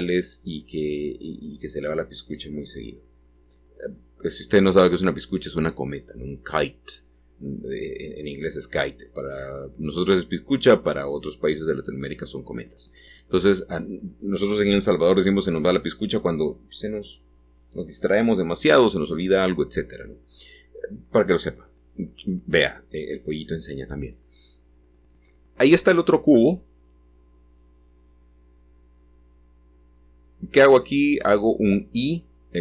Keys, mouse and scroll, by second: 1.7 s, 4.1-6.3 middle drag, 6.3-9.1 scroll down 4, 13.8-15.8 middle drag, 15.6 scroll up 1, 23.3-24.3 drag, 23.4 middle click, 25.3 h, 27.0-28.1 drag, 28.1-29.1 scroll down 1, 30.4 a.